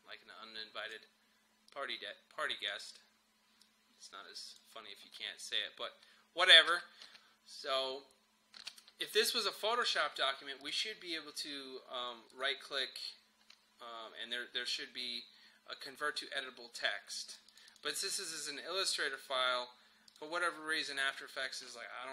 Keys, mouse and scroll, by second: 5.0 space, 9.0-10.6 drag, 12.3 right click, 17.3 click, 20.1 click.